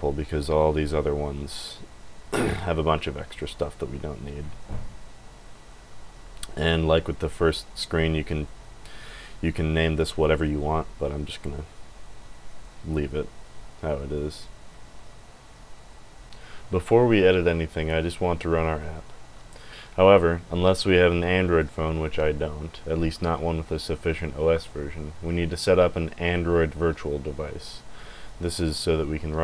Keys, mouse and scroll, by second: 0.4 scroll down 1, 1.2-1.9 scroll down 4, 3.0-3.9 scroll down 4, 4.6 click, 6.3 click, 7.1 click, 7.4 click, 8.3 click, 9.0 click, 9.5 click, 10.1 click, 12.4 click.